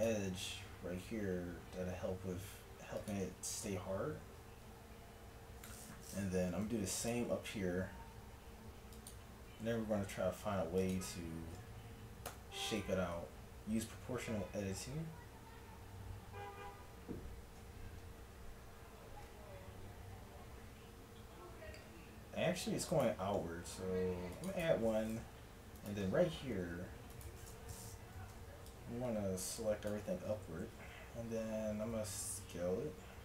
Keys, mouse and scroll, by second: 4.5 a, 6.7 ctrl+r, 9.7 a, 10.5 ctrl+r, 12.3 o, 13.1 s, 24.1 ctrl+r, 25.8 click, 26.7 s, 28.1 z, 30.6 z, 31.9 s.